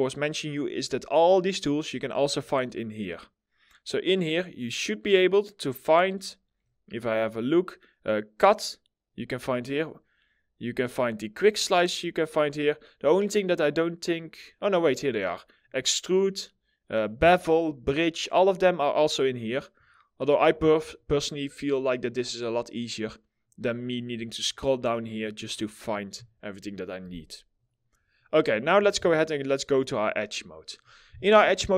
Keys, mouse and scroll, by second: 2.0-2.5 scroll down 1, 6.0-8.1 scroll up 1, 11.9-12.6 scroll up 1, 23.3-24.9 scroll down 1, 24.9-27.7 scroll up 1, 27.7 middle click, 28.5 middle click.